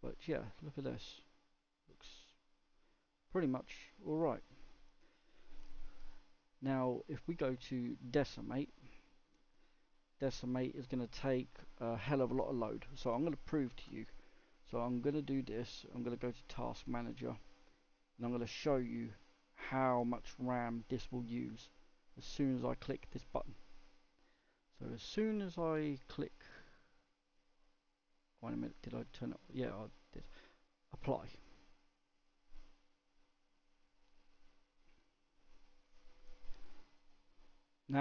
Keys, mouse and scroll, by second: 1.7 scroll down 2, 2.2-4.4 middle drag, 4.4-8.7 scroll down 1, 8.7-10.9 middle drag, 10.9-11.5 scroll up 2, 11.5-31.4 scroll down 1, 31.4-31.7 scroll down 1.